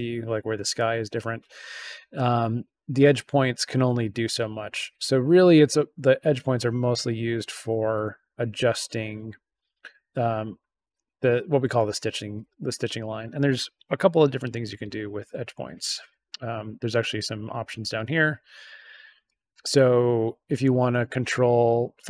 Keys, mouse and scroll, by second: 2.2-9.5 drag, 12.5 click, 16.0 click, 19.2-22.0 drag.